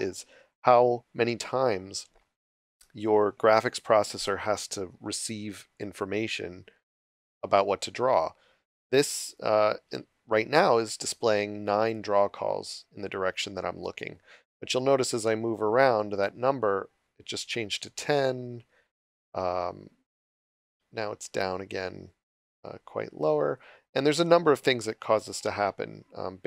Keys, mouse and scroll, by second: 5.7 click.